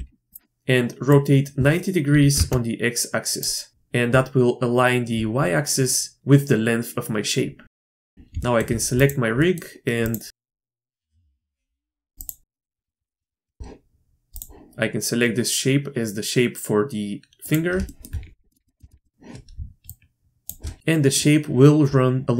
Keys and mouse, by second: 1.2-3.7 drag, 7.7 shift+middle click, 7.9 middle click, 8.0 shift+middle click, 8.4 shift+drag, 8.9 click, 9.4 click, 11.1 Tab, 12.2-12.6 drag, 12.9 shift+click, 13.0 click, 13.2 shift+click, 13.5 shift+click, 17.8 shift+click, 18.5 drag, 18.6 middle click, 18.8 shift+middle click, 19.0 middle click, 19.9 shift+middle click.